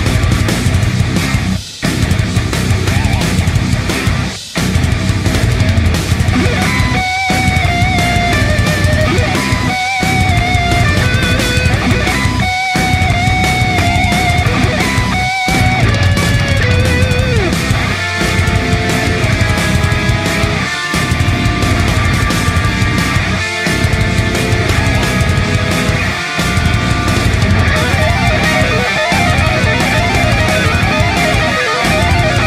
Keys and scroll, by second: 2.3-8.9 space, 11.4-12.4 space, 13.0 space, 15.4 p, 18.7 a, 20.1 ctrl+space, 20.6-22.1 typing, 23.5 ctrl+space, 23.7 v, 29.5-30.3 space, 31.9 p.